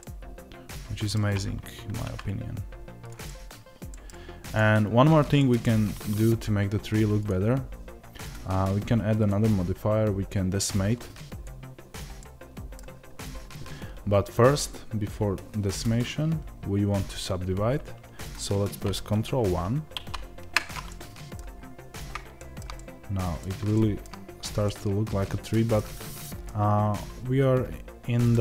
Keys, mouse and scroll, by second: 0.0-1.8 middle drag, 1.8 ctrl+a, 3.2 middle click, 4.5 click, 5.3-7.2 middle drag, 7.2 click, 12.1-15.9 middle drag, 15.9-19.9 drag, 19.9 ctrl+1, 20.8-28.4 middle drag, 21.4-22.3 scroll up 1, 24.0 scroll down 1, 27.8 scroll down 1.